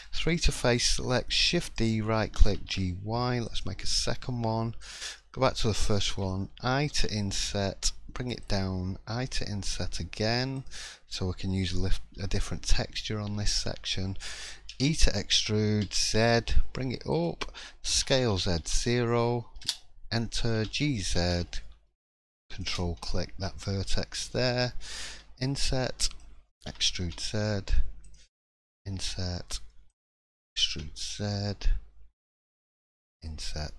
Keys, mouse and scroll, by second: 0.1 scroll down 1, 0.3 shift+middle click, 1.4 shift+d, 2.4 g, 3.9 shift+middle click, 4.2 scroll up 2, 4.8 click, 5.1 middle click, 5.8 shift+middle click, 6.9 i, 23.0 middle click, 23.4 scroll up 1, 23.8 shift+middle click, 24.3-25.0 scroll down 1, 25.1 i, 26.7 e, 32.3 e.